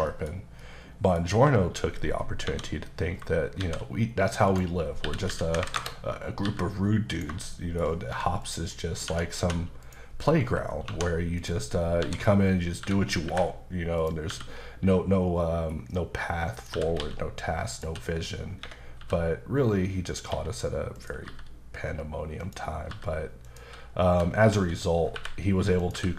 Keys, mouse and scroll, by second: 0.1 shift+middle click, 0.3 scroll down 1, 0.6 middle click, 2.4 KP_7, 3.6 shift+a, 4.5 click, 5.5 KP_9, 5.7 KP_Enter, 6.4 g, 7.1 click, 7.4 shift+middle click, 8.4 click, 8.7 middle click, 9.1 Tab, 9.4 typing, 10.8 2, 11.4 click, 12.0-13.2 typing, 14.0 click, 14.3 e, 16.6 click, 16.7-19.0 typing, 17.7 click, 18.6 Escape, 20.9 click, 21.2 g, 22.4 click, 22.9 g, 23.4 click, 24.1-25.9 typing, 25.8 click.